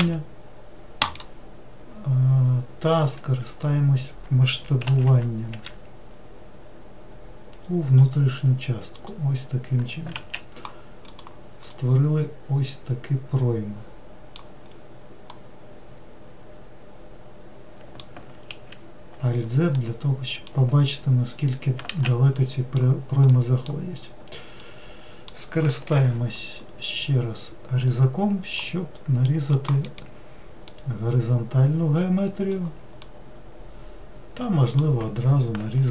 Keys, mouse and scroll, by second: 0.0 e, 4.8 alt+z, 5.5 s, 10.1 alt+z, 11.1 click, 11.7-14.7 middle drag, 14.7-15.3 scroll up 2, 15.3-18.3 middle drag, 18.5 alt+z, 19.8-21.3 middle drag, 21.3-21.9 scroll down 1, 21.9 alt+z, 22.4-23.9 middle drag, 23.9-24.6 scroll down 1, 24.6-25.9 middle drag, 25.9 ctrl+r, 30.7-35.9 middle drag.